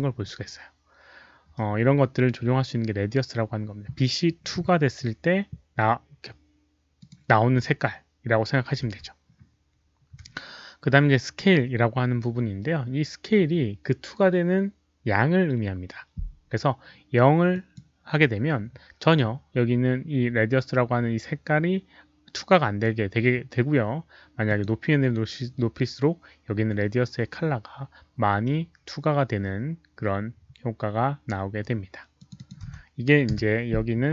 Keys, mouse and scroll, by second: 1.9 click, 7.0 right click, 7.5 z, 8.8 z, 10.7 z, 11.4 z, 14.5 right click, 17.5 click, 18.3 click, 18.3 z, 19.6 z, 19.8 click, 24.4 click, 28.2 click, 32.1 click, 32.3 click, 32.6 1.